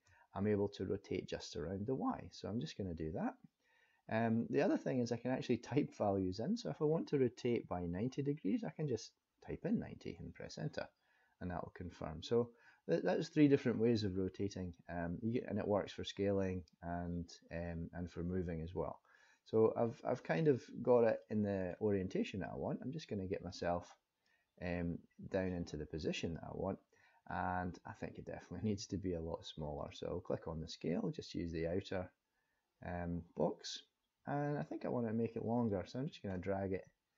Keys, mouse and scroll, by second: 20.4 click, 21.2 middle click, 22.4 click, 25.4 click, 27.3 scroll up 2, 29.7 click, 31.2 click, 35.6 click.